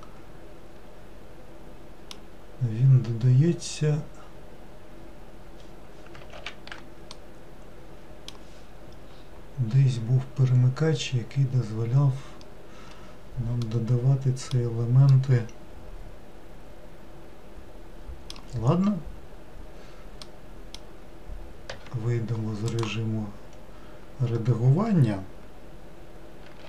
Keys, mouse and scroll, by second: 6.5 ctrl+z, 7.2-9.2 middle drag, 9.2 scroll down 3, 9.8 scroll down 4, 12.5-13.7 scroll up 1, 13.7-18.2 middle drag, 20.3-21.8 middle drag, 21.8 Tab, 22.8 click.